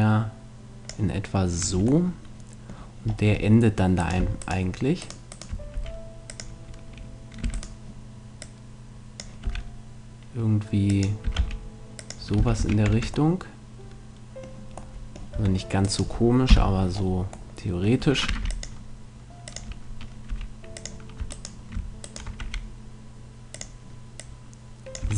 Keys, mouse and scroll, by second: 1.6 a, 2.1 middle click, 2.9-4.0 middle drag, 4.0-7.1 right drag, 5.7 s, 6.4-7.6 drag, 7.4 e, 8.2 right click, 9.5 click, 9.5 s, 11.0-13.3 drag, 11.3 s, 12.4 f, 12.6 a, 12.9 Tab, 13.3 middle click, 15.3 Tab, 15.9 click, 16.5 KP_Decimal, 18.5 ctrl+r, 19.7 click, 20.3 s, 21.3-22.6 drag, 21.3-22.7 right drag, 22.5 s, 25.0 a.